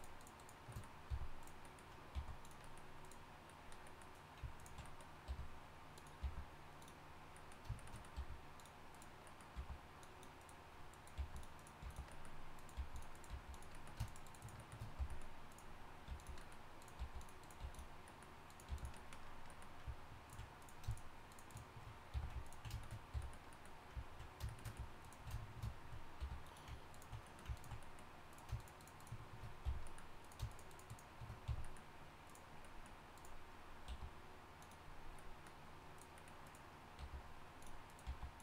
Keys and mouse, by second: 1.1 f, 2.1 g, 5.3 r, 6.2 g, 8.1 r, 8.9 click, 9.5 g, 11.2 g, 11.8 g, 12.7 g, 13.3 g, 14.3 shift+right click, 15.0 f, 16.1 g, 17.0 g, 17.6 g, 18.7 g, 22.1 f, 23.1 f, 26.2 r, 28.6 shift+right click, 29.6 f, 30.5 shift+right click, 31.5 f, 33.8 g, 37.0 g, 38.1 g.